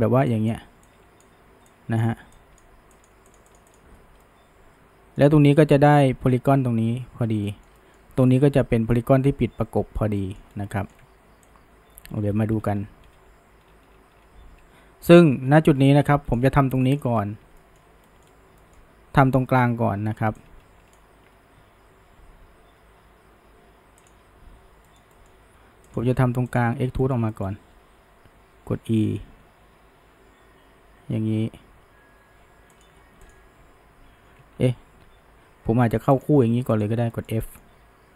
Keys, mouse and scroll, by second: 4.2-7.3 middle drag, 7.5-10.5 shift+middle drag, 10.5 scroll down 1, 10.7 shift+middle click, 11.5-14.5 ctrl+drag, 16.8 shift+middle click, 17.2-17.6 scroll up 1, 17.6-20.4 shift+middle drag, 20.4-23.5 ctrl+drag, 24.0 click, 24.9-25.9 middle drag, 25.9 drag, 26.5 shift+drag, 27.0-27.7 shift+middle drag, 27.7 e, 33.3 click, 34.6 ctrl+z, 34.9 ctrl+z, 36.2 shift+drag, 36.8 shift+drag, 37.1-37.8 shift+middle drag, 37.8 f.